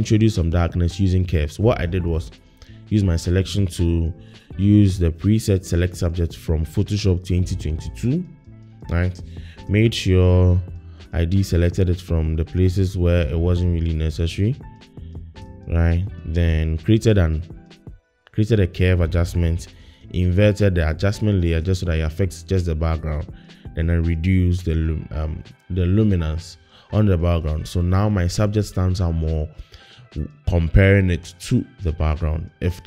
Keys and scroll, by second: 20.8 super+i.